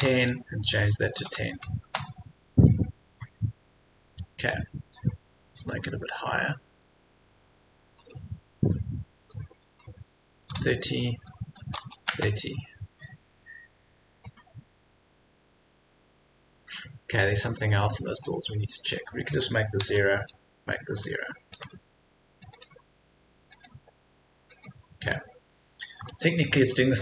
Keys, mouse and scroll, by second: 0.8 click, 1.1 KP_1, 1.8 KP_0, 3.1-5.5 scroll up 1, 5.5-10.4 drag, 10.4 KP_3, 11.3 click, 11.6 KP_3, 14.2 click, 19.8 KP_0, 20.7 click, 20.9 KP_0, 22.4-25.3 drag, 25.3-25.7 scroll up 1, 26.1 Escape, 26.3-26.7 scroll down 1, 26.7 Escape.